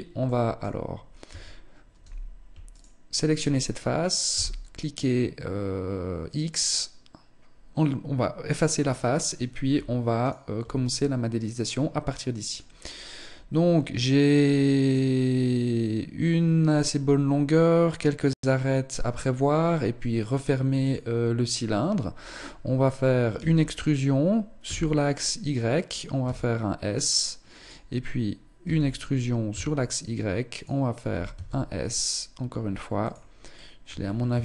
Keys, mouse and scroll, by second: 0.7 Tab, 2.2 alt+right click, 3.8 alt+x, 9.8 alt+right click, 10.3 middle click, 22.7 e, 25.3 click, 25.6 s, 28.0 e, 30.7 s, 32.9 shift+middle click, 33.4-33.7 scroll up 3, 33.9 shift+middle click.